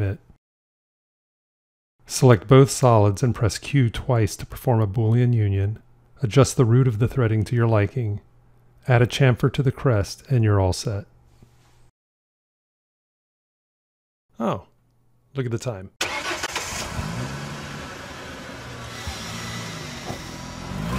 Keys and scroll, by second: 3.7 q.